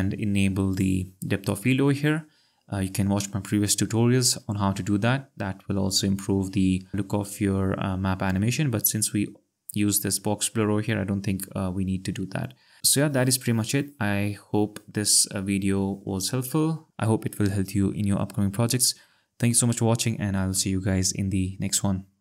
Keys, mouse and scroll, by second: 0.7 click.